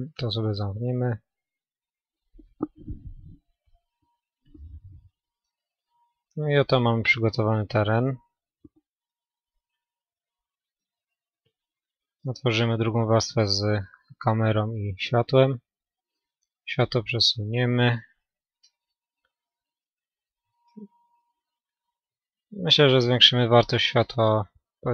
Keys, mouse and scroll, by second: 2.7 a, 3.0-3.6 scroll up 1, 3.6-6.5 middle drag, 4.7 Tab, 8.4-10.0 middle drag, 11.3-13.0 drag, 12.3-14.1 middle drag, 13.6 KP_7, 15.1-16.9 right drag, 17.0-18.6 drag, 20.2-24.9 middle drag.